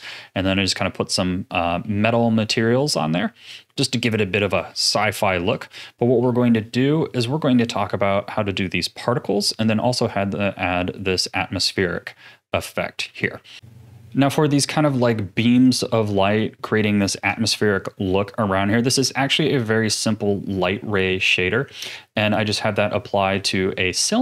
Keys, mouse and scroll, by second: 1.8-5.7 middle drag, 5.7 scroll up 5, 6.3-9.3 shift+middle drag, 10.0 click, 10.9-12.6 middle drag, 12.6-13.2 scroll down 1, 13.2 ctrl+s, 14.1-20.2 middle drag, 23.5 z.